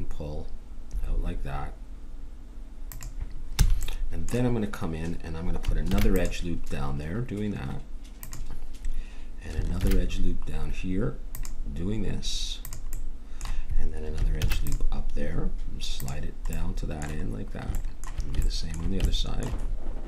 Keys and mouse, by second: 3.6 a, 5.9 ctrl+r, 9.8 ctrl+r, 14.4 ctrl+r.